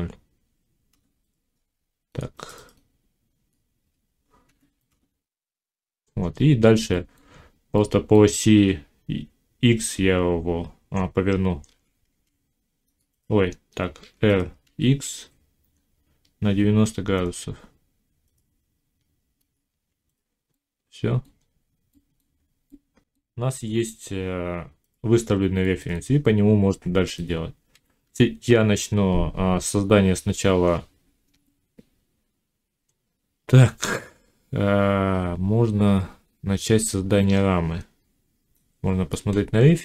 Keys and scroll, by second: 0.8 Return, 4.3 0, 4.7 Return, 8.4 r, 11.5 r, 13.9 r, 27.6 1.